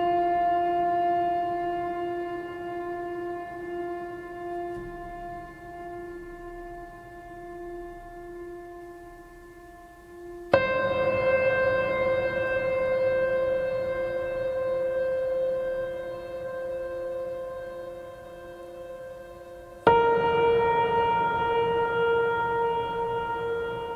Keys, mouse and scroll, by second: 0.3 scroll down 1, 1.5-2.4 drag.